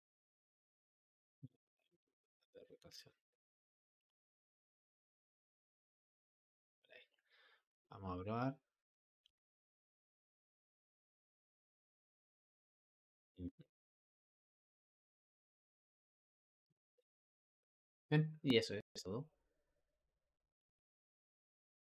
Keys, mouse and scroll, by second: 0.6 r, 3.8-6.9 drag, 8.7-9.1 drag, 9.1 space, 17.1 Escape.